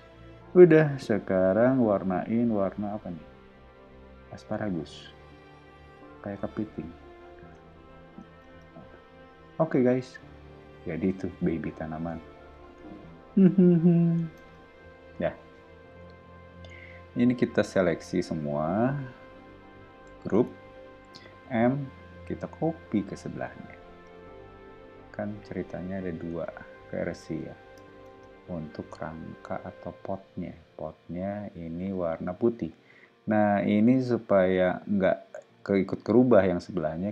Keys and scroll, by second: 8.4 space, 8.8 ⟲, 10.7 o, 14.3 space, 14.7 ⟲, 15.1 o, 17.6 space, 20.3 super+g, 21.4 m, 25.9 o, 28.1 space, 32.4 ⟲.